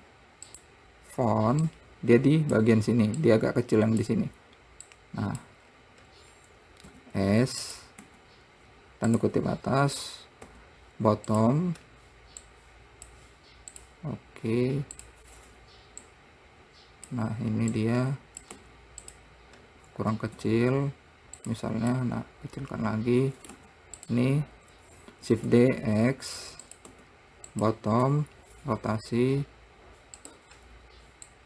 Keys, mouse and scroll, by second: 2.1 click, 3.6 click, 5.3 click, 6.0 scroll up 5, 7.3 s, 8.4 `, 10.9 r, 12.9 click, 14.1 click, 15.4 click, 16.5 click, 18.2 click, 18.9 `, 20.8 s, 22.4-24.0 middle drag, 24.0 `, 25.7 shift+d, 28.4 r.